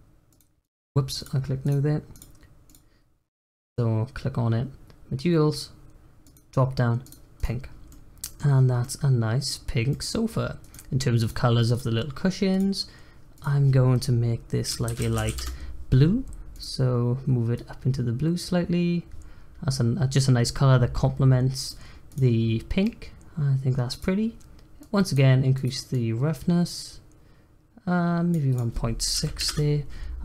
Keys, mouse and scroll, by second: 0.2 click, 1.6-3.3 drag, 6.2-7.4 drag, 7.7 scroll down 2, 7.8 middle click, 8.8 middle click, 9.5-9.9 scroll up 3, 9.9 middle click, 10.2-10.6 scroll up 1, 10.6 click, 11.2 click, 11.7 click, 12.5-16.3 drag, 16.5 click, 22.8-23.9 middle drag, 23.9 click, 24.7 click, 25.9-30.2 drag.